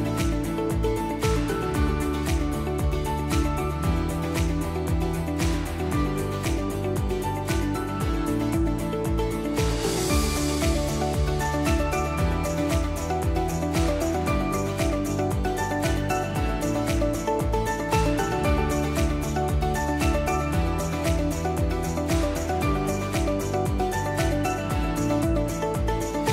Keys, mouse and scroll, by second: 0.8-2.3 drag, 2.4 click, 3.8 click, 5.4 click, 7.1 click, 8.6 click, 8.6 click, 9.5 click, 9.6 click, 10.6 click, 11.1 click, 11.3 Delete, 12.5 click, 14.3 click, 14.9 click, 15.0 click, 15.8 click, 16.0 Delete, 17.6 click, 19.4 click, 19.9 F1, 20.2 F2, 20.8 click, 20.9 click, 21.4 click, 21.4 click, 21.9 click, 22.2 Delete, 22.5 F1, 23.2 click, 25.4 click.